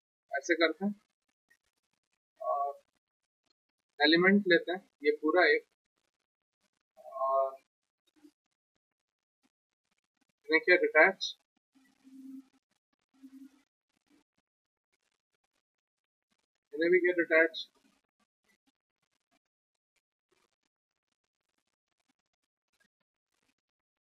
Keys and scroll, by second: 2.5 5, 11.5 Return, 16.8 Return.